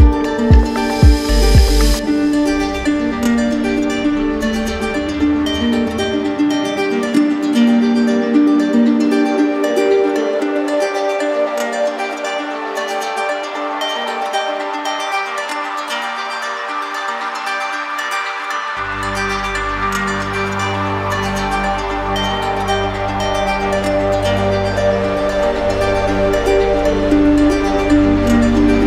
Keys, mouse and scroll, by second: 0.1 shift+right click, 0.9 shift+right click, 2.8 click, 3.9 shift+right click, 5.1 ctrl+z, 5.1 alt+right click, 10.7 shift+click, 12.3 alt+right click, 16.0 click, 19.3 click, 22.7-23.8 drag, 25.6-26.6 right drag, 28.3-28.8 drag.